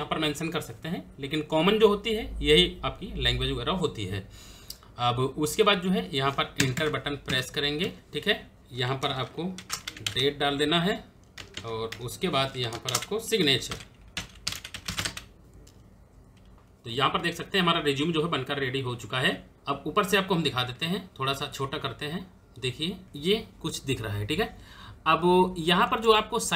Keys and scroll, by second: 6.3 Return, 9.0-10.8 typing, 11.3 Tab, 12.5-15.0 typing.